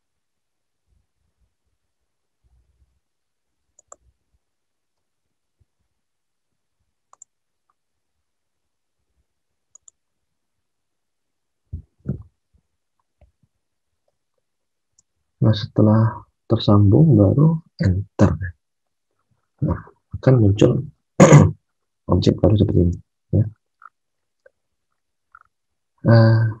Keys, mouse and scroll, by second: 5.5 ctrl+z, 12.0 alt+Tab, 14.9 alt+Tab, 18.1 Return, 19.9 Return, 22.7 alt+Tab.